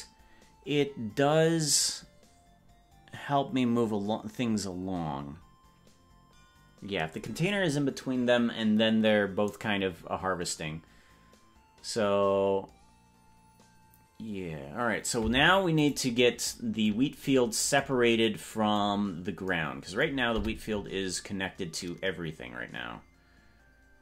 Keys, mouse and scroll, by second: 16.1 right click, 19.1 scroll down 2, 19.3 scroll down 2, 20.5 Tab.